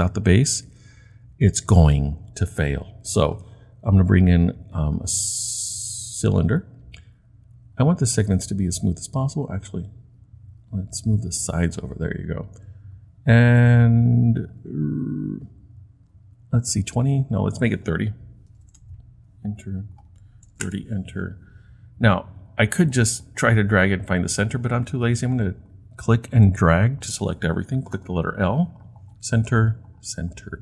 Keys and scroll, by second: 18.3-19.1 typing, 20.5 typing, 28.0 l.